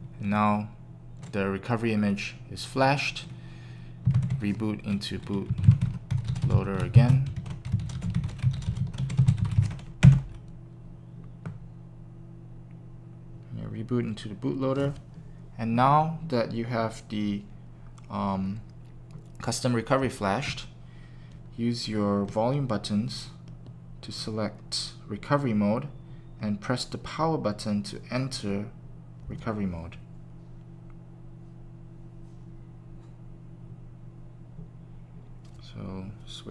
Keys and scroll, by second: 5.2-6.8 typing, 8.2-10.2 typing, 10.0 Return.